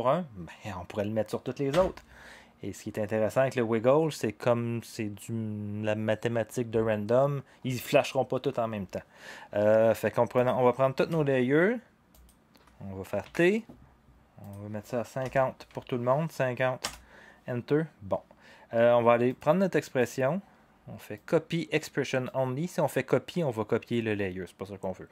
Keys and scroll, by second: 1.7 0, 13.3 t, 15.1-15.8 typing, 16.8 Return.